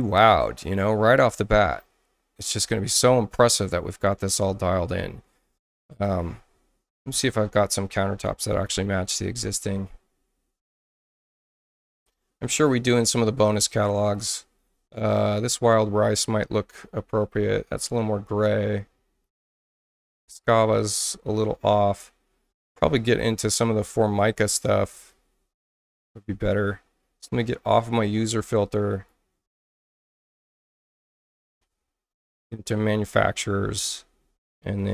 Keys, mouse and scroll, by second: 6.9 click, 7.6-9.2 typing, 10.0 middle click, 10.0-12.0 scroll down 10, 14.1 click, 16.8-17.2 scroll down 4, 17.9 scroll down 2, 19.2 click, 20.5 scroll down 2, 21.5 middle click, 21.8 middle click, 24.1 scroll down 2, 24.9 scroll down 2, 25.2 scroll up 2, 25.8 scroll up 2, 26.2 middle click, 27.4 click, 27.9 click, 28.9 click, 31.5-32.1 scroll up 4, 33.0 click, 34.8 click.